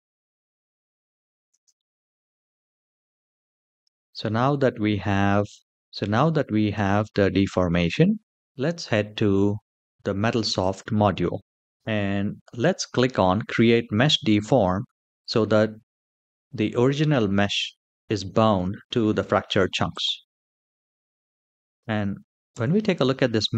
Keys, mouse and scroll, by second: 1.2 space, 1.5-3.7 middle drag, 3.8 click, 4.9 shift+middle click, 5.3-5.7 scroll down 2, 5.7 shift+middle click, 8.3-8.6 scroll down 1, 10.3 click, 19.6 click, 21.7 click, 22.3 Tab.